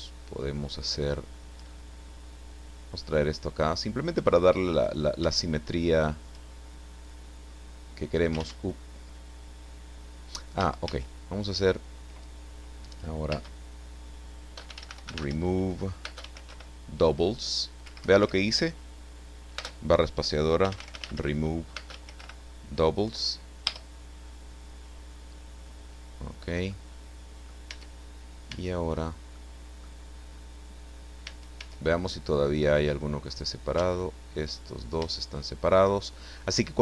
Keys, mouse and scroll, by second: 0.9 shift+right click, 2.5-4.2 drag, 4.8 right click, 5.9 shift+right click, 7.0-8.5 drag, 8.4 ctrl+z, 10.5 a, 13.6 space, 14.7-16.5 typing, 17.8 Escape, 19.6 space, 20.6-22.1 typing, 23.0 Down, 23.6 Return, 25.1-25.5 scroll up 2, 25.7 scroll down 1, 26.7 middle click, 27.7 Tab, 28.5 Tab, 29.4 middle click, 30.1 scroll up 1, 30.3 middle click, 31.7 Tab, 32.0 right click, 32.5 click, 33.8 ctrl+z, 35.2 shift+right click, 36.1-36.8 shift+scroll down 2.